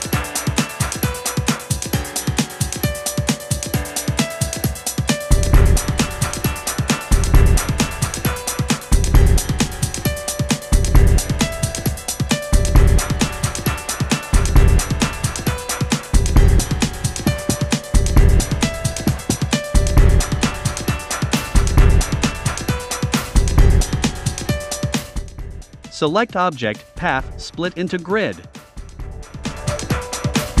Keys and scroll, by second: 13.2 v.